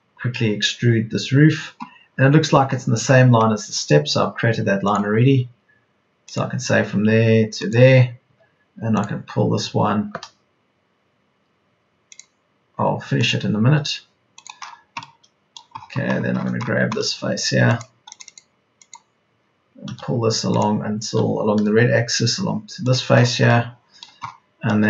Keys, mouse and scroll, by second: 17.0 space, 17.2 Escape, 19.8 m, 21.6 Right.